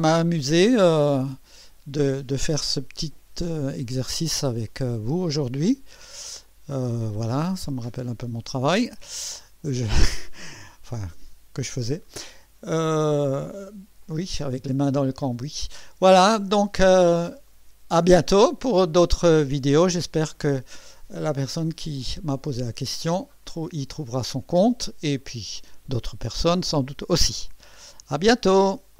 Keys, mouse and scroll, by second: 1.6 click, 2.2 space, 3.3 space, 4.6 click, 5.6 space, 6.4 click, 6.7 space, 6.8 space, 7.5 click, 7.9 space, 8.0 space, 9.0 click, 9.7-13.8 drag, 14.0-15.6 drag, 16.4 scroll up 1, 17.0 scroll down 1, 17.5-18.5 right drag, 20.0-24.5 drag, 28.1 right click.